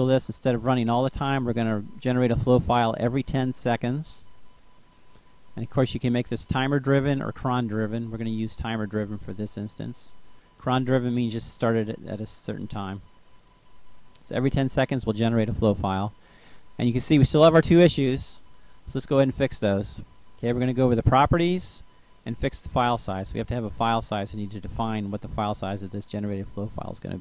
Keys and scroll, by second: 2.8 1.